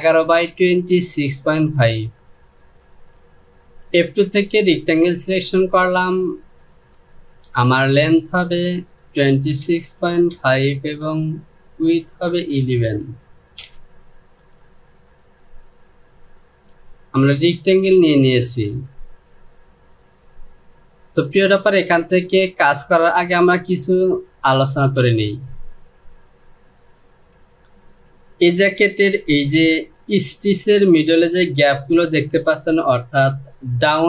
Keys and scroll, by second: 8.8 KP_2, 9.1 KP_6, 9.4 KP_Decimal, 9.9 KP_5, 10.4 Down, 12.2 KP_1, 12.5 KP_1, 13.2 Return, 16.2 Home.